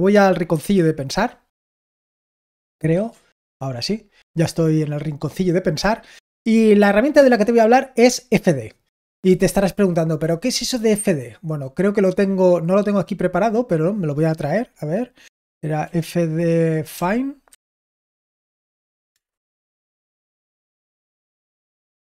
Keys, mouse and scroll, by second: 0.4 ctrl+2, 2.9 ctrl+1, 7.1 BackSpace, 12.6-15.8 drag, 15.8 typing, 16.9-19.0 typing, 19.0 Return, 21.1 f.